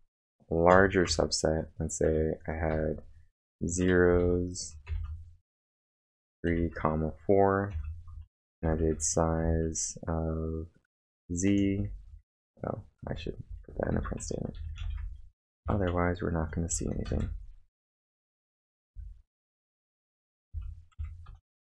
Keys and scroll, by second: 0.7 o, 1.1 Return, 2.0-4.9 typing, 6.6-9.4 typing, 8.1 Return, 12.8-15.6 typing, 17.1 space, 17.2 f, 18.7-21.7 typing.